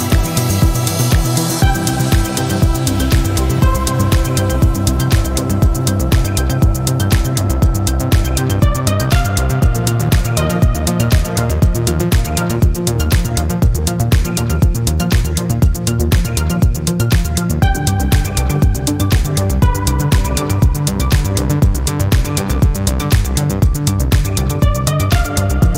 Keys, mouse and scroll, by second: 1.0 click, 2.4 click, 3.3 click, 4.3 click, 5.6 click, 8.0 click, 10.3 click, 11.7 click, 12.9 click, 15.2 click, 16.2 click, 17.4 click, 18.4 click, 19.7 click, 21.6 click, 23.8 click, 25.5 click.